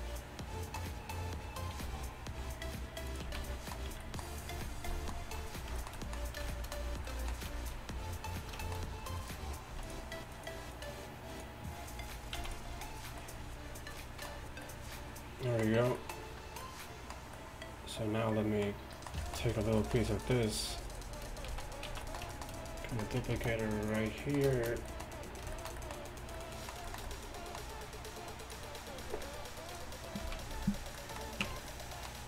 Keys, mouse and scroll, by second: 4.0 z, 4.0 a, 9.8 c, 12.4 x, 21.5 z, 21.9 z, 23.5 shift+d, 30.3 z, 31.5 Tab.